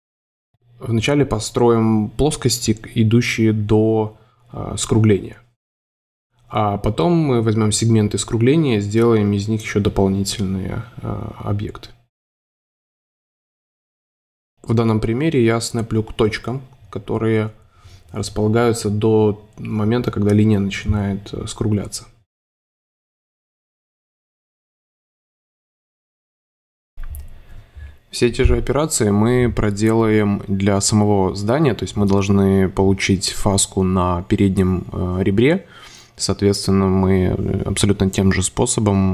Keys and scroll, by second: 1.5 super+3, 2.7 v, 4.0 space, 5.9 space, 9.1 shift+v, 11.0 super+space, 13.2 space, 15.2 shift+v, 15.8 space, 17.8 space, 20.4 space, 22.2 space, 22.9 space, 24.4 space, 27.6 m, 31.4 space, 31.9 super+y, 38.0 space.